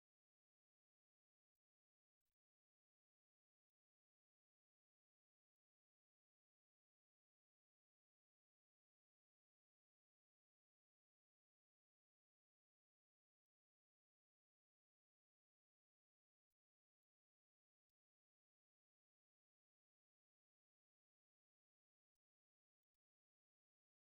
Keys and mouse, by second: 0.0 right click, 0.3 right click, 1.1 right click, 1.9 right click, 2.7 ctrl+click, 3.5 ctrl+click, 5.6 ctrl+click, 7.3 ctrl+click, 9.2 right click, 9.4 shift+right click, 10.3-11.4 typing, 11.2 ctrl+click, 12.3 middle click, 13.4 middle click, 14.4 f, 15.9 ctrl+click, 16.7 right click, 17.1 shift+right click, 17.9 f, 18.3 middle click.